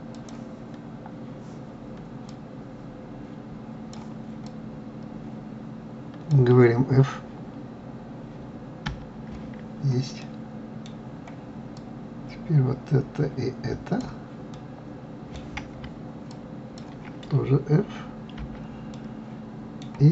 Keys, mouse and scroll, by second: 0.6 click, 2.7-7.9 drag, 9.3 f, 10.6-12.2 middle drag, 12.2-15.0 drag, 15.0-16.7 middle drag, 16.7-18.8 shift+drag, 18.8 f, 19.3-20.1 middle drag.